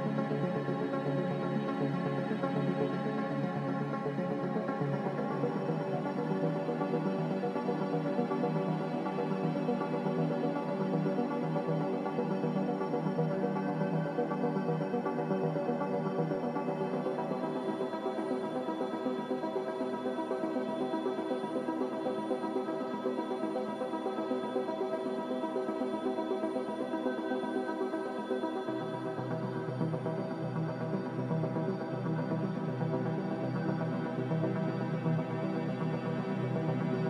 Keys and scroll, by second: 20.1 a.